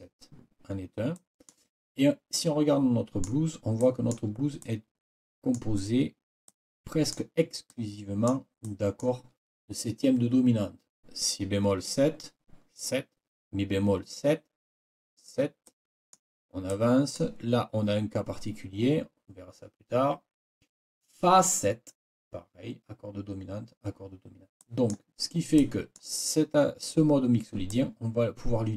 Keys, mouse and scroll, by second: 1.1 click, 2.3-3.4 drag, 3.4-4.3 scroll up 2, 4.6-5.7 scroll up 1, 6.5-7.3 scroll up 1, 7.7-8.5 scroll up 1, 8.6 click, 15.7 click, 16.7 click, 24.6 click, 25.6 click, 27.7 click, 28.3 click, 28.5 click, 28.7 click.